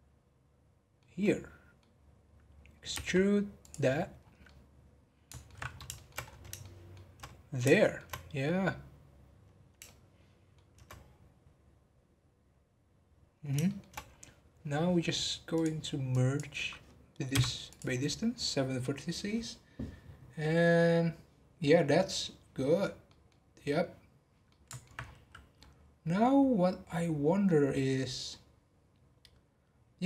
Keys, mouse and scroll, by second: 2.9 e, 3.9-4.2 scroll down 6, 4.4-5.6 middle drag, 5.6 scroll up 1, 5.9 shift+middle click, 6.2 scroll up 1, 6.6-8.2 shift+middle drag, 8.2-8.7 scroll up 2, 9.1-9.4 scroll down 2, 9.8-13.0 shift+middle drag, 13.6 shift+middle click, 14.0-15.5 scroll up 2, 15.5 click, 17.3 m, 18.7-21.8 scroll down 4, 22.5 scroll down 2, 23.0 middle click, 23.9-24.4 scroll down 3, 24.4 middle click, 25.0-25.4 scroll up 12.